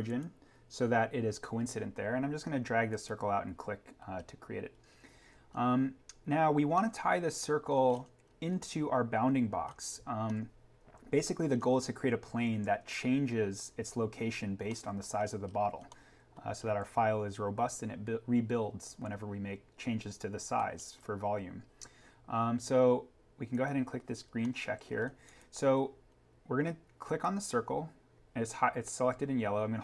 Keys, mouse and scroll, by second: 0.0 click, 2.8 click, 4.1-4.7 scroll up 1, 6.7 middle click, 7.9 scroll up 1, 8.2-9.6 scroll down 1, 9.6 scroll up 1, 10.2 middle click, 10.8-11.5 scroll, 14.4 scroll down 1, 14.6 middle click, 15.4-15.7 scroll up 1, 15.7 scroll down 1, 15.8 middle click, 16.9-18.8 scroll down 1, 20.5-20.9 scroll up 1, 22.8 scroll down 1, 24.2 scroll up 1, 24.3 middle click, 25.2 click.